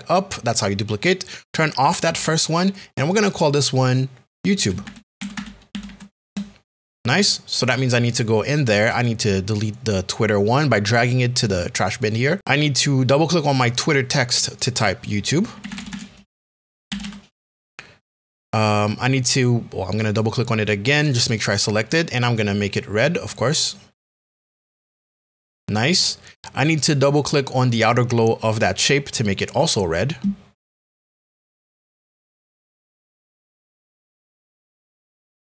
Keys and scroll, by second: 4.7-5.8 typing, 6.2 Return, 15.4-17.3 typing.